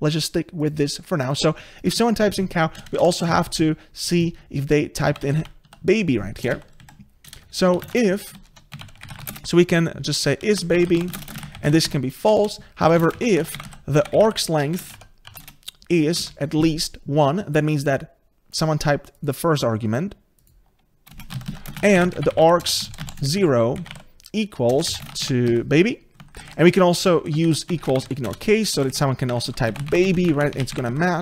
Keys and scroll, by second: 8.5 ctrl+BackSpace, 9.0 ctrl+BackSpace, 14.7 Return, 16.9 Return, 24.7 Return, 29.4 ctrl+shift+Left, 30.3 ctrl+shift+Left.